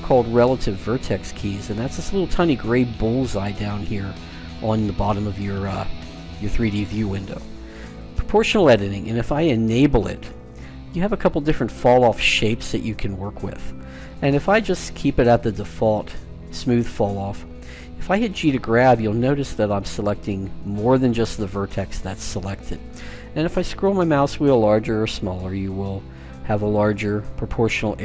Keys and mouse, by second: 8.4-18.3 drag, 18.3 g.